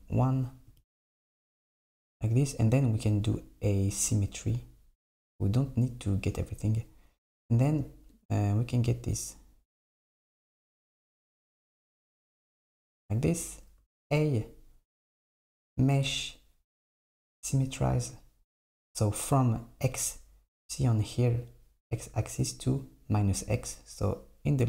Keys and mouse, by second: 0.7 j, 8.2 click, 10.1 j, 13.8 a, 15.4-18.5 drag, 24.5-24.6 drag.